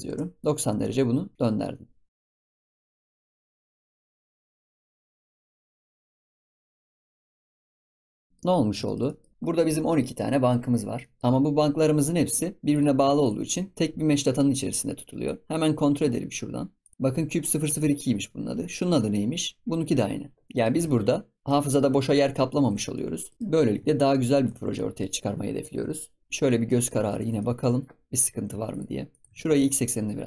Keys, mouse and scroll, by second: 2.1 scroll up 2, 2.2 alt+d, 2.7 shift+middle click, 2.8 scroll down 2, 3.0 alt+d, 5.1 shift+click, 5.2-5.7 shift+middle drag, 5.7 shift+click, 5.8 shift+click, 8.1 click, 8.2 scroll down 2, 8.2 middle drag, 8.4-8.8 scroll up 7, 8.8-9.3 shift+middle drag, 10.7 scroll down 2, 11.0 middle click, 12.6 click, 13.1 shift+click, 14.0-15.1 scroll down 3, 15.1-16.0 drag, 16.0-16.7 scroll up 10, 16.7 click, 17.2-17.6 scroll down 2, 18.6 click, 20.3 scroll down 2, 20.5-20.8 middle drag, 20.8 ctrl+s, 21.4-21.9 shift+middle drag, 21.9 scroll down 2, 22.2-22.5 middle drag, 22.5 ctrl+s, 22.7 scroll up 3, 22.9 middle click, 23.6-23.9 scroll up 4, 23.9 shift+middle click, 24.2 scroll down 4, 24.5 ctrl+s, 24.7-25.6 middle drag, 25.6 KP_7, 26.2 scroll up 3, 26.4 scroll down 2, 26.6-27.0 shift+middle drag, 27.0 ctrl+s, 27.3-28.6 shift+middle drag, 28.6 shift+click, 29.1 shift+click, 29.2 g.